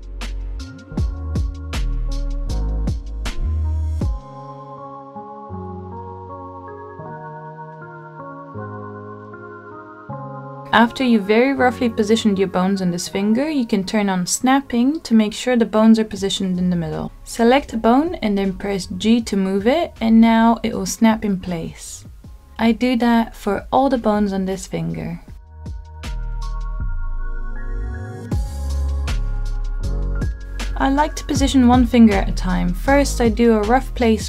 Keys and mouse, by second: 1.5 g, 3.3-4.6 middle drag, 5.9 g, 7.1 click, 8.4 click, 9.3 g, 12.2 g, 13.4 click, 14.2 middle click, 15.6 g, 17.2 click, 18.1 middle click, 19.1 click, 20.2 g, 21.5 click, 22.0-23.2 middle drag, 23.4 click, 23.9 g, 25.3 click, 25.5 middle click, 26.1 middle click, 26.3 middle click, 26.5 click, 26.8 g, 27.2 click, 27.3 middle click, 27.7 click, 27.9 g, 28.6 click, 28.8 middle click, 29.3 middle click, 29.7 middle click, 30.4 middle click, 30.7-34.2 typing, 30.9 click, 31.3 click, 31.9 middle click, 32.1 click, 32.7 middle click, 32.9 click, 33.4 middle click.